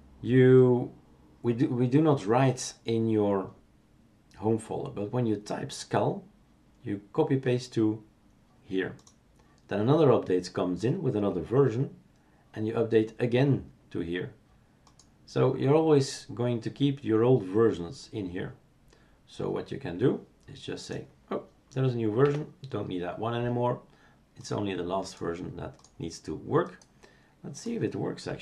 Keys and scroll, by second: 22.2 Delete.